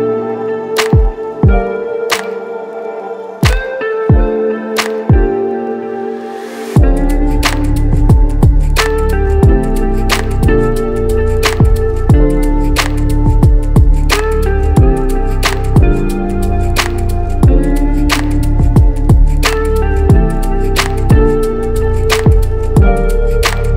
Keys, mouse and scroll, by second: 0.0 KP_Subtract, 0.7 e, 0.8 e, 1.4 Escape, 2.3 ctrl+z, 2.4 ctrl+z, 4.9-5.5 right drag, 6.2 e, 6.3 e, 7.3 Escape, 8.6 s, 8.6 s, 13.1 Return, 14.2 KP_Subtract, 14.3 KP_Subtract, 15.5 e, 15.6 e, 16.3 Escape, 17.1 s, 17.2 s, 21.8 Return.